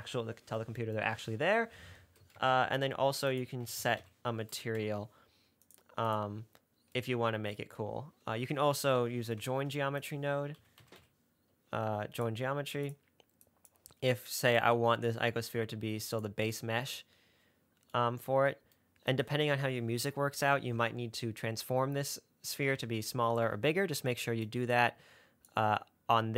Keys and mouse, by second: 2.6 shift+a, 9.8 shift+a, 13.7 click, 14.9-16.5 drag, 24.8-25.8 drag.